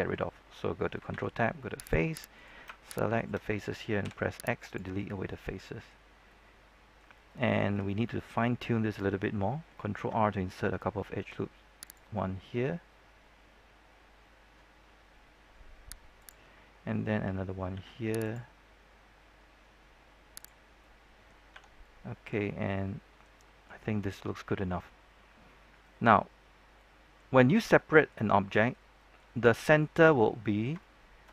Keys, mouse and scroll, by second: 1.7 ctrl+Tab, 1.7 click, 2.3 right click, 3.1 shift+right click, 4.0 shift+x, 4.6 click, 5.0 scroll down 1, 5.2 middle click, 6.0 scroll up 1, 6.2 middle click, 7.5 scroll up 1, 7.8 shift+middle click, 9.9 ctrl+r, 11.8 click, 17.7 ctrl+r, 18.2 click, 20.6 scroll down 1, 20.7 middle click, 21.5 Tab, 21.8-23.3 middle drag, 24.4 scroll down 1, 24.7-25.2 scroll up 1, 25.2-25.8 scroll down 1, 25.8 middle click, 26.2-26.7 scroll up 1, 26.7 middle click, 27.3-27.7 scroll up 1, 27.7-31.3 middle drag.